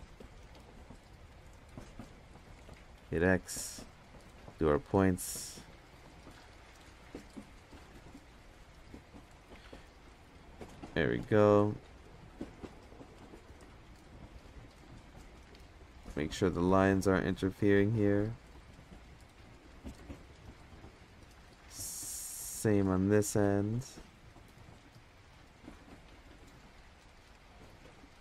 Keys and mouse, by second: 0.2 z, 2.6 x, 4.0 middle drag, 5.4 click, 6.5 ctrl+KP_Add, 6.7 ctrl+KP_Add, 7.1 ctrl+KP_Add, 9.5 x, 10.9 click, 11.6 click, 13.7 g, 16.3 g, 18.3 g, 20.6 middle click, 21.1 middle click, 21.5 middle click, 21.9 middle drag, 22.3 middle drag, 23.3 middle click, 24.1 click, 25.2 ctrl+KP_Add, 25.3 ctrl+KP_Add, 25.4 ctrl+KP_Add, 25.6 ctrl+KP_Add, 25.8 ctrl+KP_Add, 26.5 ctrl+KP_Add, 27.2 ctrl+KP_Subtract.